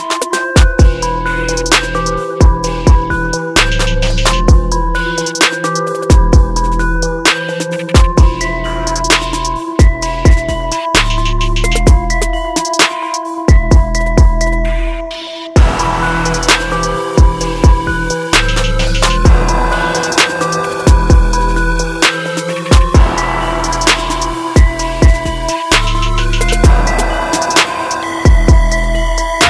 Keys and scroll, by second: 16.0 ctrl+t, 17.7 ctrl+=, 20.4 ctrl+u.